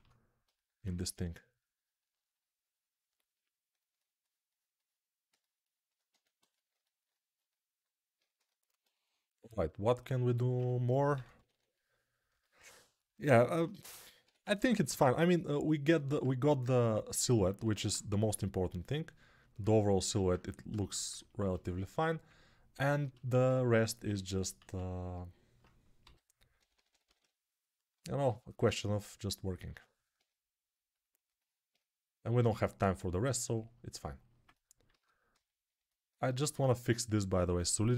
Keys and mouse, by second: 0.1 alt+q, 0.8 2, 6.0 1, 11.0 p, 11.2 [, 11.4 [, 13.7-14.7 typing, 15.7 alt+], 18.0 3, 23.0-28.4 alt+shift+drag, 23.0-28.4 alt+shift+right drag, 24.0 alt+q, 25.9-27.1 typing, 34.8 alt+q.